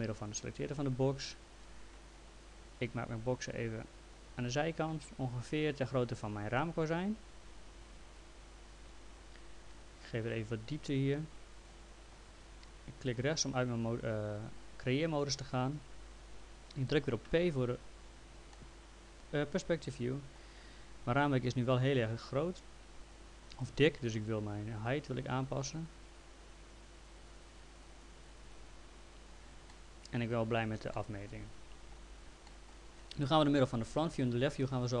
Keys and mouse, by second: 3.5 click, 9.7 click, 13.0 right click, 17.3 p, 18.5 alt+middle click, 21.4 click, 24.9 click, 29.7 middle click, 31.0 middle click, 32.5 alt+middle click.